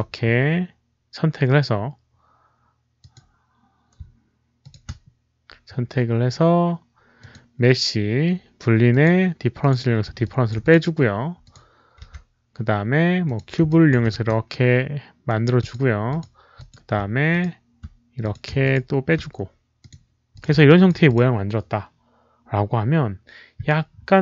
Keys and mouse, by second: 0.0-0.4 typing, 2.7-3.5 typing, 2.9 shift+click, 2.9 middle click, 3.0 middle click, 4.5 shift+click, 6.2-6.9 typing, 6.4 shift+click, 6.4 middle click, 7.1 shift+click, 8.8 shift+click, 9.5 shift+click, 10.1 alt+shift+drag, 10.5 shift+click, 11.3 shift+click, 13.1 alt+click, 13.1 z, 13.6 alt+click, 14.1 r, 14.4-15.5 middle drag, 15.5 alt+click, 16.0 alt+click, 16.5 alt+click, 16.5 middle click, 16.5 r, 17.2 shift+click, 18.1 shift+click, 18.5 shift+click, 18.6 middle click, 19.7 shift+click, 20.2 click, 20.6 alt+shift+click, 21.0 shift+click, 22.3 shift+click, 22.4 shift+click.